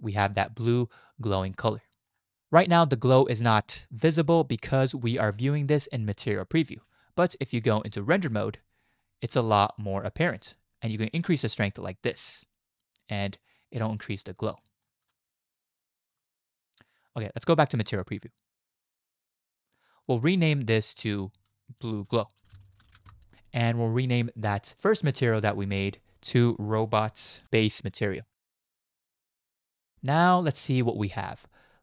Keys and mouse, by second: 2.3 z, 5.7 z, 7.8 z, 9.0-9.7 drag, 11.5-14.8 drag, 15.1-16.1 drag, 17.5 z, 18.7-19.8 drag, 20.9-23.1 drag, 25.6 click, 25.9-29.6 drag, 30.4 click.